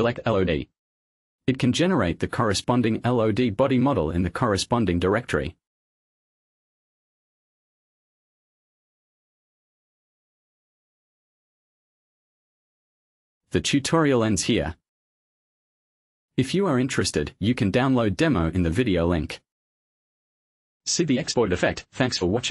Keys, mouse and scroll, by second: 1.6 click, 5.7 click, 6.3 click, 7.1 click, 8.8 click, 9.4-9.7 scroll up 1, 9.8 click, 12.0-12.4 scroll up 1, 12.5-12.9 scroll down 1, 13.1 click, 14.2 click, 15.3 click, 19.1 click.